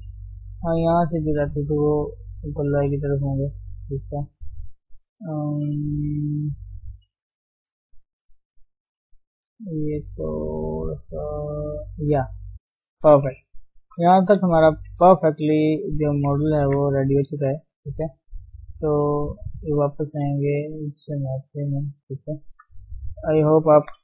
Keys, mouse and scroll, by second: 0.5 shift+middle click, 0.7-1.7 scroll up 1, 1.7-4.9 drag, 4.9 scroll down 2, 5.0-6.5 middle drag, 6.5 scroll up 1, 6.6-7.8 shift+middle drag, 7.8 scroll up 2, 8.0 middle click, 8.5 scroll down 2, 8.7 shift+middle click, 9.1-9.8 scroll up 1, 9.8-11.2 drag, 11.2-12.7 middle drag, 12.7-13.8 scroll down 3, 13.8 KP_1, 16.8 ctrl+Tab, 16.9-17.5 scroll down 4, 17.5 shift+middle click, 17.7-18.2 scroll up 1, 18.2 s, 20.9 click, 21.6 scroll up 1.